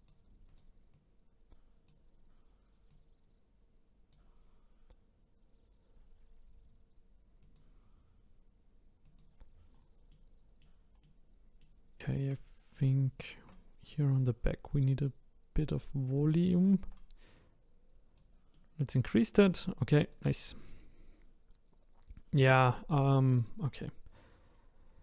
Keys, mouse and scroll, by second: 0.5 click, 0.9 click, 2.9 click, 4.4-6.9 scroll down 2, 7.4 click, 9.0 click, 9.7-10.1 scroll down 1, 10.1-11.9 middle drag, 11.9-12.2 scroll up 1, 12.7 click, 13.2 shift+click, 13.9 click, 16.0 click, 16.6 shift+click, 17.3 click, 18.5 middle click, 19.0 scroll up 1, 19.2 scroll down 2, 19.5 middle click, 20.0 click, 20.3 scroll down 1, 20.6-23.3 middle drag, 23.3 click, 24.5-25.0 scroll up 1.